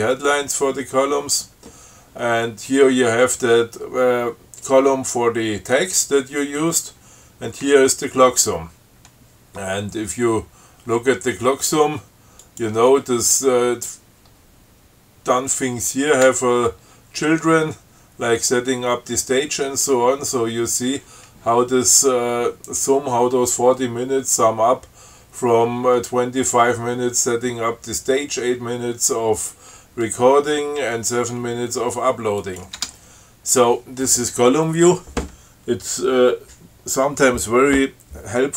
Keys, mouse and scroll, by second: 12.6 click, 16.5 Tab, 32.6 click, 33.0 Tab.